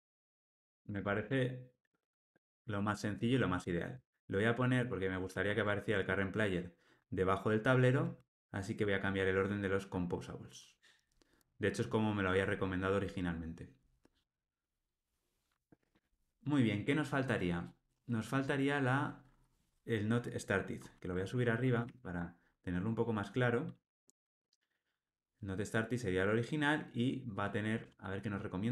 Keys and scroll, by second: 0.6 alt+super+l, 1.1 ctrl+alt+o, 3.9 alt+shift+Down, 5.2 alt+shift+Up, 8.2 shift+super+Down, 21.4 shift+super+Up.